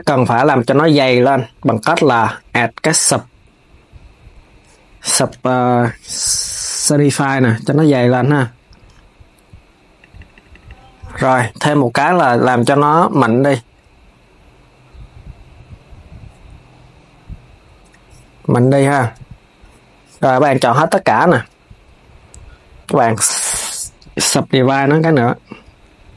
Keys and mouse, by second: 0.7-3.8 drag, 9.7-14.3 drag, 17.5-18.7 drag, 18.7 Tab, 24.0 right click, 24.5 Tab, 26.0 KP_3.